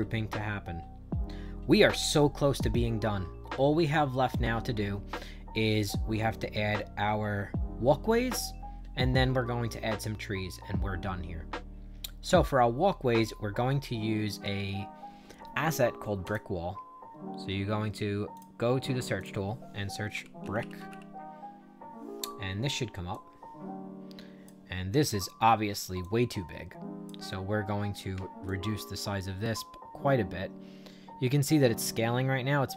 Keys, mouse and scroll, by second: 16.2 click, 18.3 click, 19.1 click, 19.8-21.3 typing, 23.0-24.4 drag, 24.8 middle click, 25.9-27.0 drag, 28.4-32.7 shift+drag.